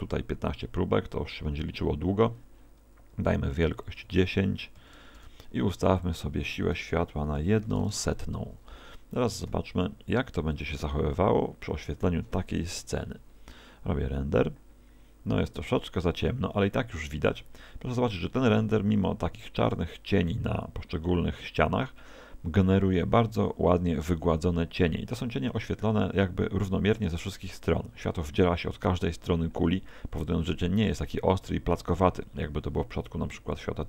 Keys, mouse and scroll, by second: 3.7 click, 6.0 click, 9.5 g, 10.6 click.